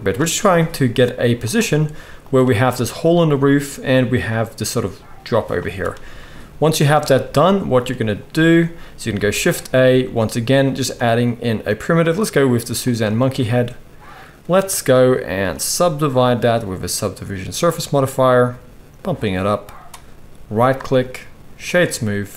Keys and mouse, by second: 0.6 g, 1.7 g, 6.1-12.3 shift+middle drag, 9.2 shift+a, 12.3-22.3 right drag, 16.0-22.3 drag.